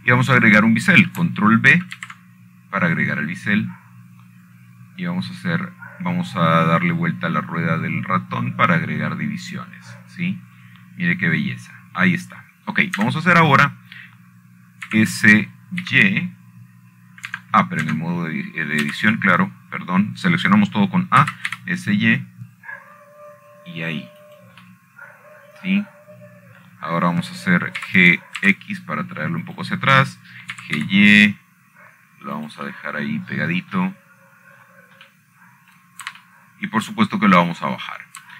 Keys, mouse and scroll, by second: 0.5 alt+shift+click, 1.5-2.4 scroll down 3, 2.4-2.8 scroll up 5, 4.7 ctrl+b, 8.3 scroll up 3, 9.2-10.3 scroll up 5, 11.0 scroll up 2, 12.2 click, 12.7-14.5 scroll down 5, 15.7 Tab, 17.6 s, 18.5 y, 20.0 Escape, 20.6 Tab, 21.6 a, 23.9 s, 24.2 y, 26.9-28.0 drag, 29.4 middle click, 30.5 g, 31.1 x, 32.2 click, 32.8 click, 33.3 g, 33.5 y, 35.1 click, 36.3 middle click, 37.3 middle click.